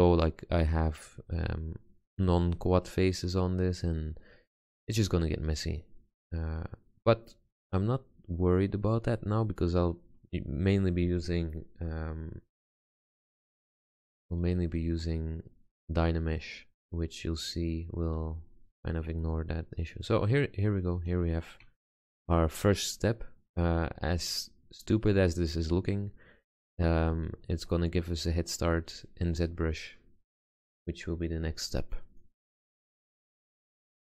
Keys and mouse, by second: 6.3-8.6 middle drag, 8.7 middle click, 14.9 Tab, 17.7-18.2 middle drag, 23.7-25.5 middle drag, 26.8 middle click.